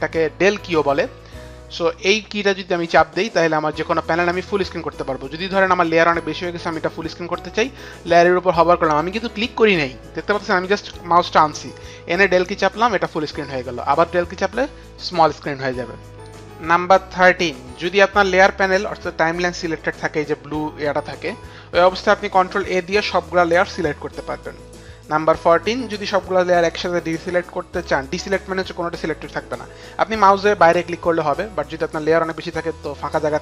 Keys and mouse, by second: 2.0 click, 16.3 click, 22.3 ctrl+a.